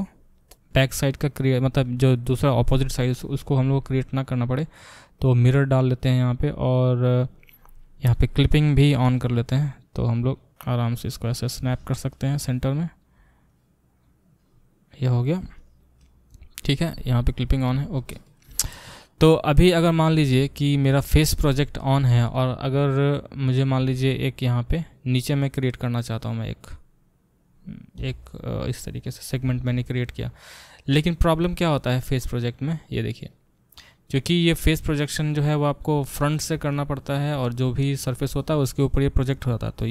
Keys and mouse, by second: 3.0-8.8 drag, 8.8-9.8 middle drag, 9.8-19.6 drag, 19.6 middle click, 19.7 click, 19.8-39.9 alt+middle drag, 28.0 e.